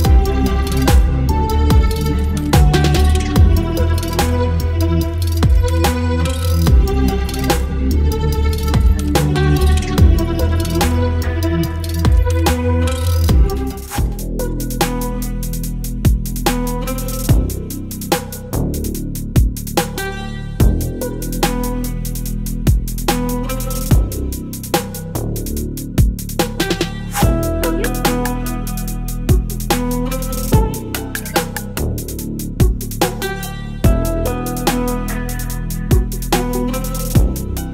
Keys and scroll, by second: 0.0-0.6 typing, 3.5 v, 5.6 t, 7.8-11.0 typing, 12.9 ctrl+a.